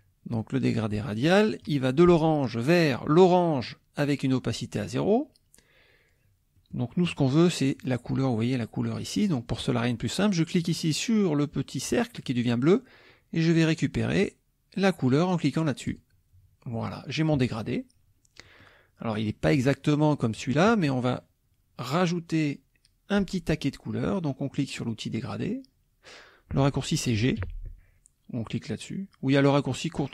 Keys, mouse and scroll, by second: 1.6 click, 3.1 click, 6.6 click, 10.6 click, 15.9 click, 17.3 KP_Subtract, 18.4 middle click, 18.4 scroll up 1, 18.5 click, 19.1 click, 27.4 g.